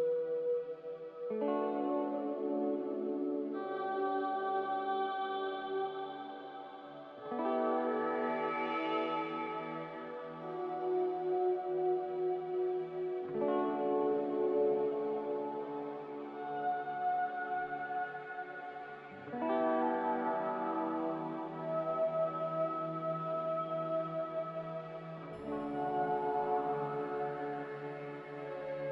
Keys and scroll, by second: 1.3 b, 13.9 a, 16.3 b, 25.8 q, 27.2 a, 28.0 q.